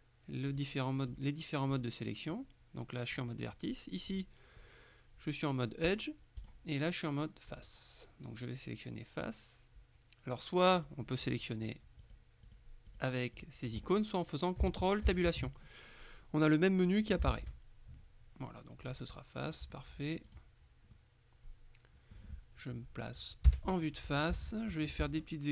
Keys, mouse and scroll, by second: 0.6-1.7 drag, 3.2 right click, 4.2 click, 5.9 right click, 7.6 click, 10.8-11.9 drag, 12.1-14.3 drag, 15.1 ctrl+Tab, 17.4 ctrl+Tab, 18.9 click, 20.3 middle click, 21.0 middle click, 21.7 right click, 23.5 KP_1, 24.5 shift+middle click.